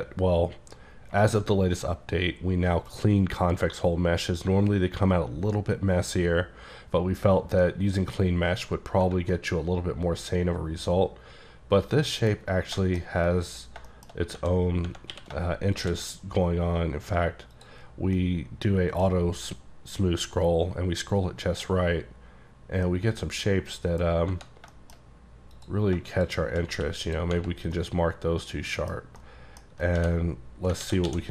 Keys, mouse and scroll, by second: 6.4-7.3 scroll down 1, 7.3-7.7 scroll down 2, 7.7 middle click, 8.3-9.3 scroll down 5, 9.4-12.4 middle drag, 12.4-12.8 scroll up 4, 12.9 shift+middle click, 13.1-13.8 shift+scroll up 3, 13.8 shift+scroll up 4, 13.9 shift+scroll down 1, 13.9 shift+middle click, 14.1 shift+scroll up 3, 14.4 Tab, 14.9 Tab, 15.2 q, 15.8 click, 16.1-16.8 scroll down 5, 16.8-17.6 scroll up 1, 17.6 click, 18.2 middle click, 21.4-22.9 scroll down 5, 22.9 middle click, 24.1 scroll up 1, 24.3 Tab, 24.8 shift+middle click, 25.1-25.6 scroll up 2, 25.6 click, 26.8 q, 27.1 click, 27.5 scroll down 3, 27.8 middle click, 29.0 scroll down 2, 29.2 middle click, 29.7 scroll up 4, 30.0 d, 30.9 alt+w, 31.1 d.